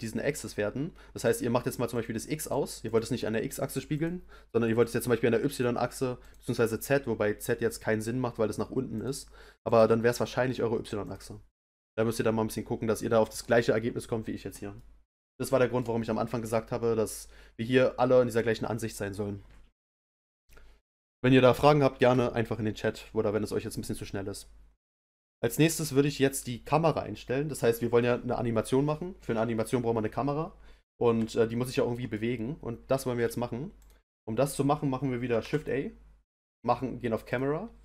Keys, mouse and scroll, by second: 1.2 click, 1.9 click, 2.4 click, 2.8 click, 3.6 click, 3.9 click, 4.8 click, 5.5 click, 6.2 click, 8.9 click, 9.6 click, 11.0 click, 14.7-19.0 middle drag, 27.6-30.5 middle drag, 30.5-30.9 scroll up 1, 31.2-33.8 shift+middle drag, 33.8 click, 35.4 shift+a.